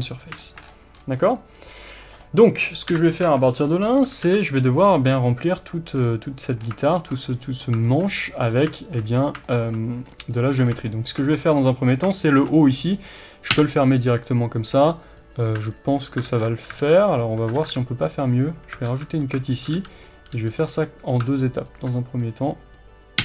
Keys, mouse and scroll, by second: 0.4-5.7 shift+middle drag, 0.6-1.0 scroll down 1, 2.1-2.9 scroll up 1, 2.9 KP_7, 3.3 Tab, 3.7 scroll up 1, 4.3 alt+a, 4.5 scroll up 1, 5.7 click, 6.0-6.7 scroll down 1, 6.9-11.9 shift+middle drag, 7.3-7.9 scroll up 2, 8.5 scroll up 2, 9.2 scroll down 2, 10.1-10.7 scroll down 2, 10.7 scroll up 3, 11.4-11.9 scroll up 2, 11.9 click, 13.6 f, 16.3 ctrl+z, 16.8 alt+a, 17.1 click, 17.6 ctrl+r, 18.0 click, 18.9 alt+a, 19.2 click, 19.8 f, 20.2 click, 20.4 g, 20.8 click.